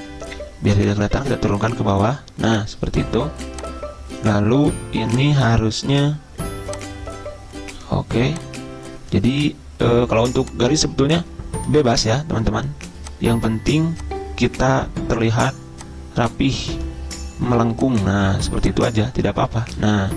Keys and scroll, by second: 1.0 ctrl+Page_Down, 1.1 ctrl+Page_Down, 1.2 ctrl+Page_Down, 1.4 ctrl+Page_Down, 1.8 ctrl+Page_Down.